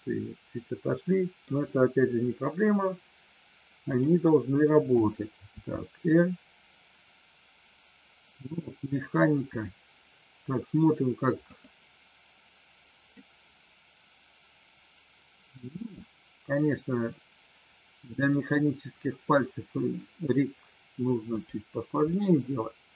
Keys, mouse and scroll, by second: 3.9-5.0 drag, 5.5 r, 13.1-15.5 middle drag, 15.8 r, 22.0-22.9 middle drag.